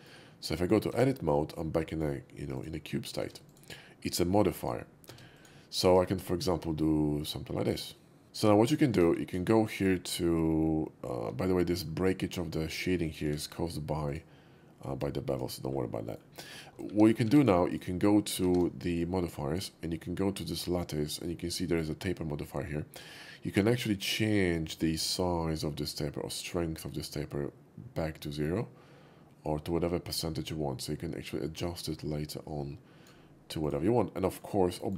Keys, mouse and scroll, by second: 0.9 Tab, 2.5 click, 3.3 Tab, 3.5 click, 3.8 click, 4.4 click, 5.4 click, 5.9 ctrl+b, 8.7 shift+middle click, 9.0 KP_5, 9.4 KP_5, 11.7 shift+middle click, 12.9 shift+click, 13.3 q, 14.1 click, 15.3 click, 16.1 middle click, 16.9 shift+2, 17.4 shift+2, 17.7 click, 18.6 ctrl+`, 19.0 click, 23.7-33.1 shift+drag, 33.6 click, 34.2 middle click, 34.5 middle click, 34.8 shift+middle click.